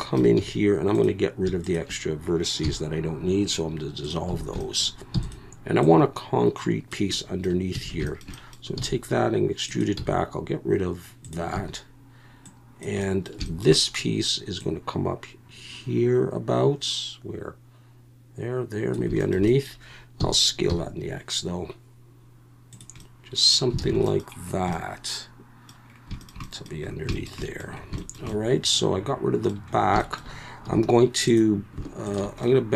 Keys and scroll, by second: 0.4 1, 2.6 x, 4.3 a, 5.1 e, 7.7 a, 8.8 e, 10.0 x, 11.5 a, 20.2 s, 20.7 x, 23.8 alt+a, 30.6 2.